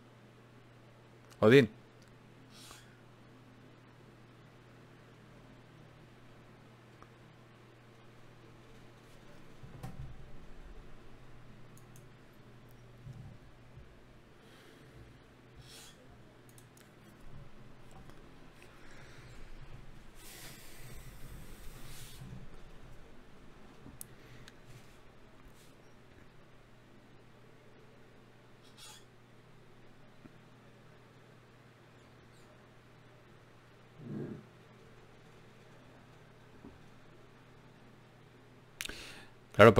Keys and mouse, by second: 0.0 g, 5.7-8.9 middle drag, 18.1 ctrl+Tab, 19.1 click, 20.7 f, 21.3-23.6 right drag, 22.3 f, 22.5 f, 23.6 f, 26.0 ctrl+Tab, 26.8-28.4 drag, 27.5 g, 29.0-30.2 drag, 29.0 g, 29.7 g, 30.8 click, 30.8 g, 31.6 g, 32.5 click, 33.6 g, 35.2 g, 36.2 g, 36.9-38.0 drag, 37.8 g, 39.0 g.